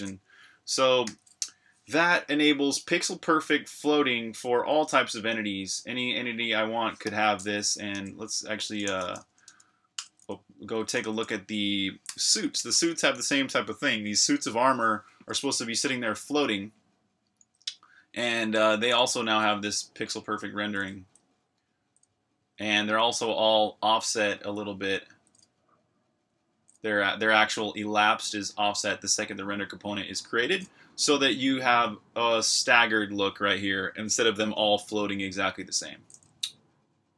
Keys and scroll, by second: 1.0 super+r, 1.1-2.2 typing, 7.9 super+q, 8.5-14.6 typing, 18.5-26.8 typing, 28.0 typing.